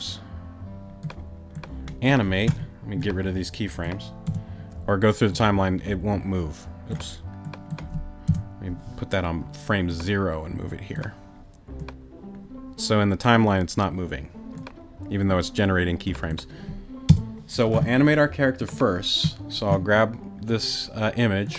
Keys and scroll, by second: 4.3 BackSpace, 8.3 BackSpace, 17.1 BackSpace.